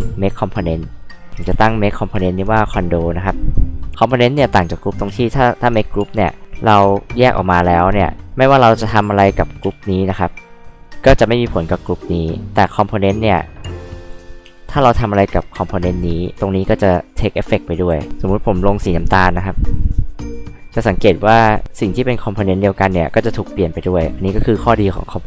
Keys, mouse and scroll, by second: 0.7 click, 1.0-2.1 typing, 2.1 Return, 4.5 h, 5.1 space, 5.5 click, 8.2 ctrl+click, 9.6 space, 9.9 click, 13.3 click, 13.4 click, 14.4 e, 15.4 click, 17.9 h, 19.4 click, 20.2 click, 21.0 scroll up 2, 21.2 middle click, 21.4 middle click, 23.8 space, 24.1 click.